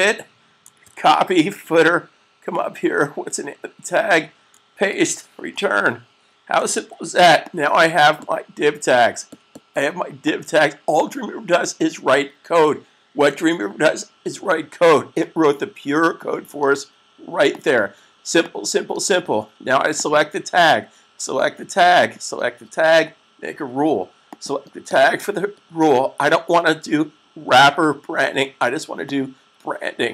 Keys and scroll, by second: 0.7 c, 4.8 super+v, 6.7 s.